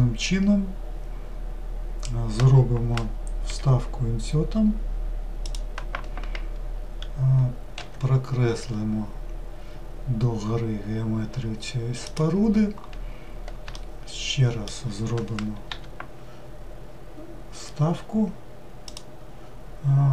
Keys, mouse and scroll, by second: 13.7-15.7 shift+middle drag.